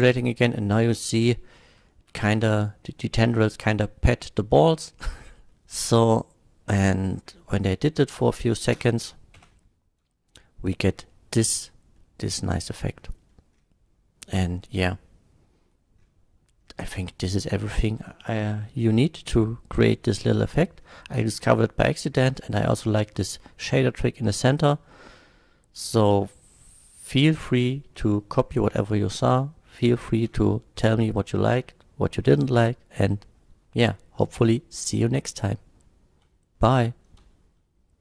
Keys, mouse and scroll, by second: 0.1-1.5 middle drag, 0.1 space, 1.9 shift+middle drag, 3.3 shift+middle drag, 4.5-4.8 shift+middle drag, 5.5 middle click, 8.1-8.5 middle drag, 8.8 space, 9.4 F12, 12.0 middle click, 13.0 middle drag, 21.4-22.0 scroll up 1, 22.0 scroll down 1, 28.8-29.3 middle drag, 34.8 middle click.